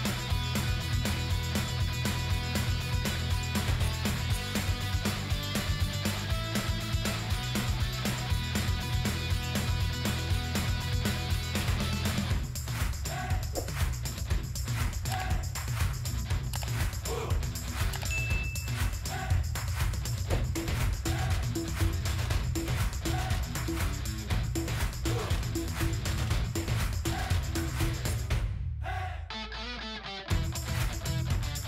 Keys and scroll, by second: 3.8 shift+g, 5.9 shift+d, 10.2 shift+=, 28.1 shift+2.